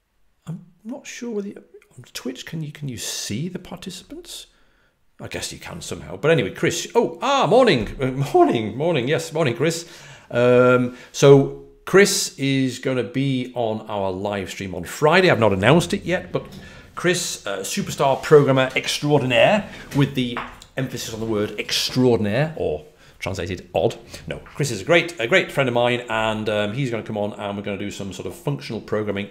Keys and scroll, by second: 15.9 typing.